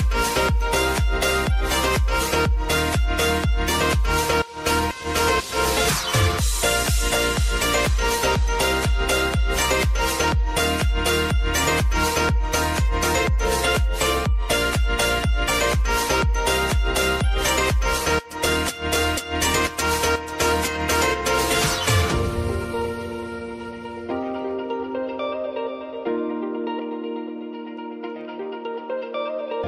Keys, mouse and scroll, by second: 3.2 Return, 5.0-7.9 drag, 8.6 Return, 9.3 click, 9.6 j, 9.9 space, 11.4 j, 13.1 click, 15.5 F9, 15.8 =, 16.7 click, 20.2 space, 22.1-26.3 drag, 26.3 space.